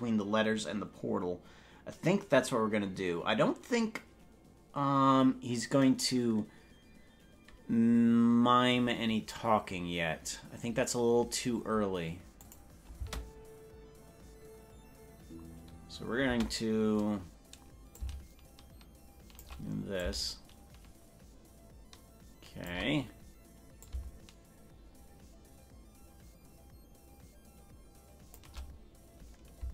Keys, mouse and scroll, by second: 12.5 click, 13.1 space, 16.5 space, 17.9-19.5 shift+drag, 20.0-22.8 shift+drag, 23.8-28.4 shift+drag.